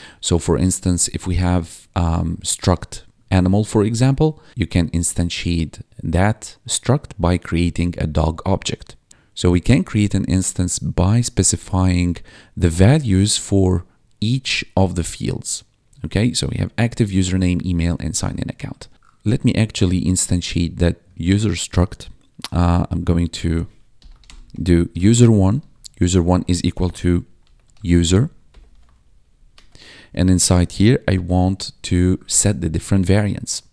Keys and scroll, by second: 13.5 1, 15.9 1, 23.6-28.1 typing, 28.4 Return, 28.6 ctrl+s, 28.9 ctrl+Down.